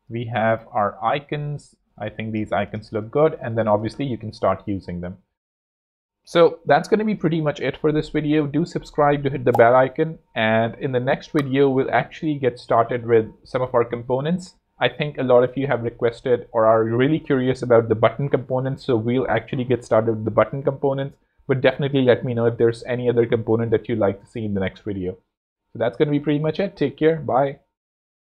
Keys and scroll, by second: 1.8 z, 2.3 space, 2.8 alt+z, 8.4 super+s.